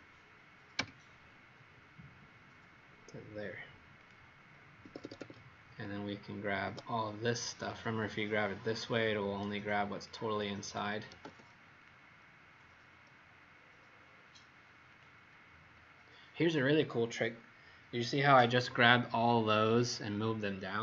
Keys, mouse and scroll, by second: 0.8 F8, 3.9 click, 4.8 Escape, 5.0 Escape, 5.2 Escape, 5.6 click, 6.6 Escape, 7.6 click, 11.1 m, 11.7 click, 14.8 click.